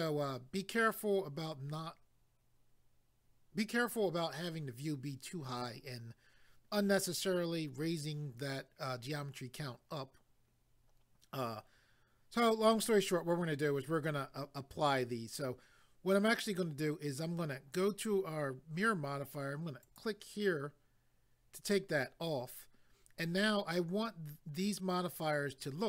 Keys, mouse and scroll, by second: 19.8 click.